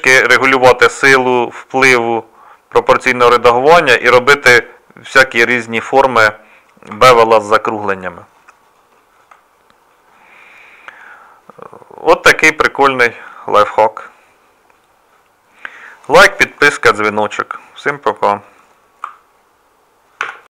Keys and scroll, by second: 6.9 Tab.